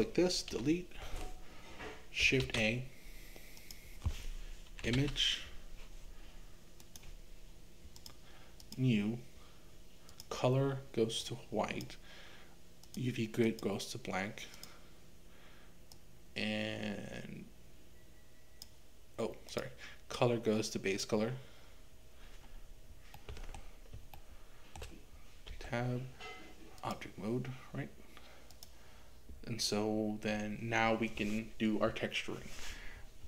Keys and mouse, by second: 0.5 Delete, 2.4 shift+a, 8.6-14.7 drag, 15.9-19.7 drag, 20.3 click, 23.3 middle click, 24.1-25.6 shift+middle drag, 25.6 Tab, 28.5 click.